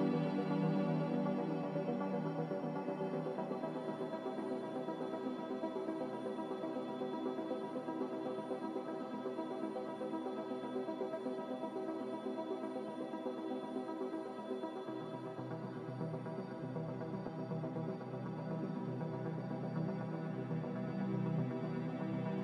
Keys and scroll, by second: 1.7 ctrl+z, 17.3 ctrl+z.